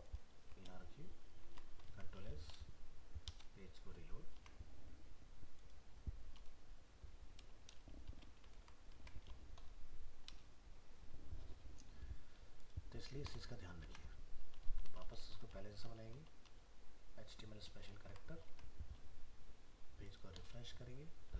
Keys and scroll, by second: 0.3 ctrl+v, 1.4 ctrl+s, 1.9 alt+Tab, 8.6 ctrl+s, 9.0 alt+Tab, 13.8 alt+Tab, 14.7 ctrl+z, 17.8 ctrl+s, 18.5 alt+Tab.